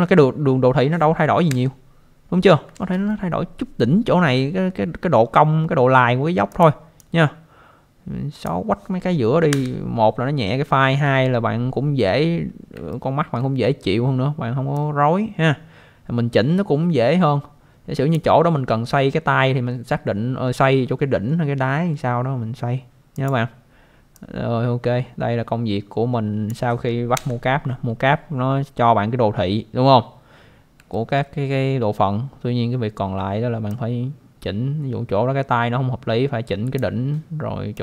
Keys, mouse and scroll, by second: 1.5 Delete, 2.7 ctrl+z, 6.5 click, 7.0 click, 9.5 Delete, 12.9 alt+middle click, 14.7 click, 23.1 click, 24.1 click, 27.1 Delete, 30.3 scroll down 1, 30.9 alt+middle click, 33.7 click, 37.7 click.